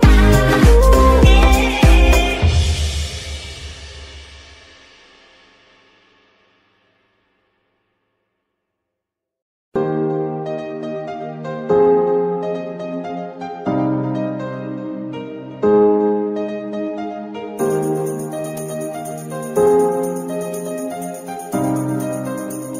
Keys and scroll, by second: 1.9 g, 2.5 Tab, 3.1 s, 3.8 Tab, 4.2 s, 6.4 g, 7.7 Escape, 8.0 r, 10.1 KP_Subtract, 10.2 KP_9, 10.3 KP_2, 10.3 KP_0, 10.9 Escape, 11.4 r, 12.0 KP_Subtract, 12.2 KP_9, 12.3 KP_0, 12.6 Return, 14.2 z, 16.7 KP_9, 16.8 KP_0, 18.2 z.